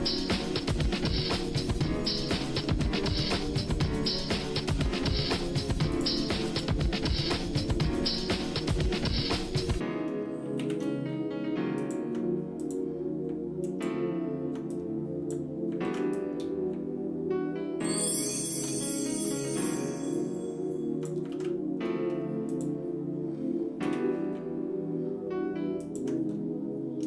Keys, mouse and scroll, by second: 1.8 middle click, 2.4 shift+middle click, 3.0 middle click, 3.6 shift+middle click, 4.4 middle click, 5.9 click, 6.5 shift+click, 8.0 shift+r, 9.5 ctrl+z, 10.6 shift+d, 12.9 click, 13.6 ctrl+right click, 14.7 click, 15.8 ctrl+z, 16.1-18.7 drag, 18.8 shift+middle click, 19.5-21.1 drag, 21.3 ctrl+z, 21.8 middle click, 22.5 click, 23.8 e, 26.3-26.6 scroll up 2.